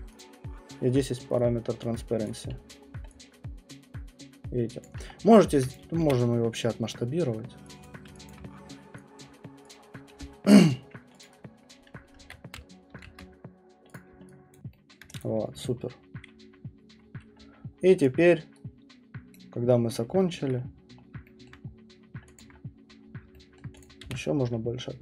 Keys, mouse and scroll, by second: 0.2 click, 1.9 click, 2.2 click, 2.5-2.8 middle click, 2.6 middle click, 3.0 middle click, 4.8 alt+right click, 5.1 middle click, 5.3 middle click, 5.7 click, 6.0 r, 6.3 middle click, 6.5 middle click, 7.8 alt+click, 7.8 scroll, 8.3 alt+click, 9.2 click, 9.7 click, 10.1 alt+click, 10.2 middle click, 10.2 alt+right click, 11.2 alt+click, 12.2 ctrl+Tab, 13.0 alt+Tab, 13.9 click, 14.5 alt+click, 14.6 alt+click, 15.0 alt+middle click, 15.2 click, 19.3 right click, 19.7-21.1 scroll, 20.4-21.4 alt+middle click, 21.5 middle click, 21.6 middle click, 23.2 alt+click, 23.6 alt+middle click, 23.8 click, 24.0 r, 24.3 middle click, 24.4 middle click.